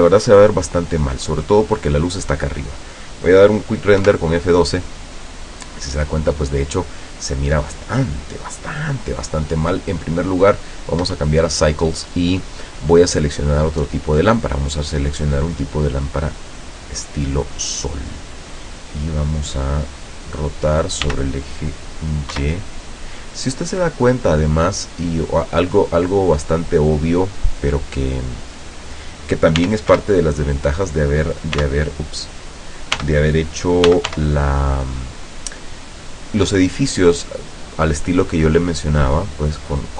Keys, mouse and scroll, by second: 0.1-1.2 middle drag, 1.8 right click, 4.1 F12, 9.9 click, 10.6 click, 11.1 Escape, 14.3 click, 15.0-15.8 middle drag, 16.1-18.6 drag, 21.1 r, 22.4 y, 24.8 click, 25.7-29.3 drag, 29.7 r, 30.0 y, 31.7 t, 33.1-34.7 typing, 35.4 click.